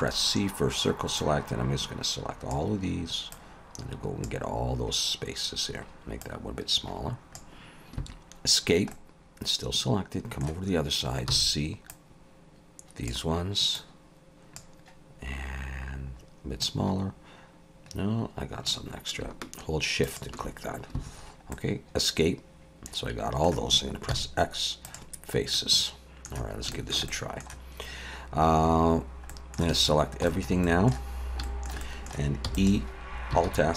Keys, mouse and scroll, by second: 8.6 scroll down 2, 8.9 middle click, 10.7-11.3 scroll up 3, 11.3 c, 21.1-22.4 scroll down 3, 21.5 middle click, 24.1 x, 25.5 middle click, 26.7 shift+middle click, 27.1 middle click, 29.3 middle click, 29.6 shift+middle click, 29.7 a, 30.0 scroll down 2, 30.3 shift+middle click, 30.6 middle click, 31.1 scroll up 2, 31.5 shift+middle click, 31.8 middle click, 32.5 e, 33.4 alt+s.